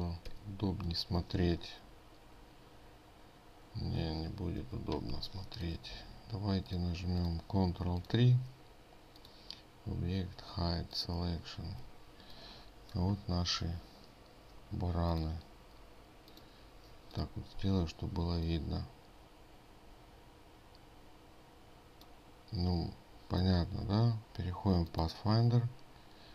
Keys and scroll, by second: 0.9 ctrl+y, 5.2 ctrl+y.